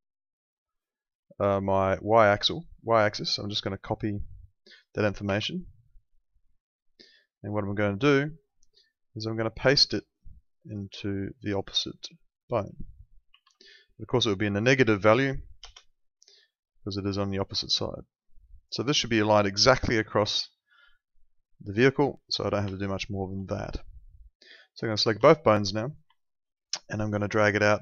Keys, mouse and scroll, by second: 0.3 ctrl+4, 6.1 ctrl+4, 8.0 click, 9.3 ctrl+4, 16.8 ctrl+4, 17.6 alt+middle click, 22.4 middle click, 22.7 alt+middle click, 24.7 ctrl+click, 25.2 alt+middle click, 26.1 alt+middle click, 27.2 alt+middle click.